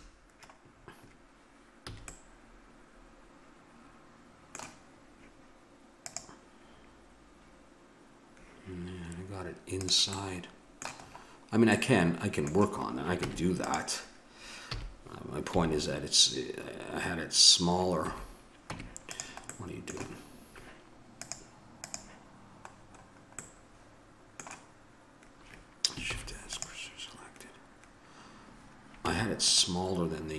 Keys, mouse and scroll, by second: 1.9 a, 2.9-3.9 middle drag, 9.9 right click, 10.2-11.6 middle drag, 13.2 Tab, 14.7 a, 15.5 s, 18.7 Tab, 19.4-21.2 middle drag, 21.2-22.3 drag, 22.7 middle click, 26.1 shift+s, 29.0 Tab.